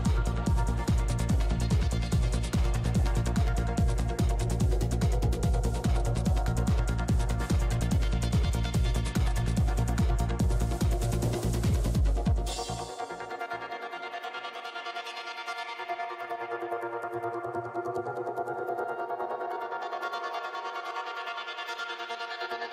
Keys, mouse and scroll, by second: 0.1-1.8 drag, 0.1 right click, 3.0-4.4 drag, 3.0 right click, 4.4 middle click, 5.0 shift+f, 5.3 shift+f, 5.7 middle click, 6.2-7.9 drag, 7.9-9.5 middle drag, 9.5-11.1 drag, 11.1 ctrl+z, 12.3-13.4 drag, 13.6 middle click, 14.0 f, 14.3-15.3 drag, 15.5 middle click, 16.0-17.2 drag, 16.0 right click, 17.2 middle click, 17.3-18.5 middle drag, 18.5-19.8 drag, 19.8 middle click, 20.8 p, 21.0 f, 21.3-22.7 drag, 22.2 middle click.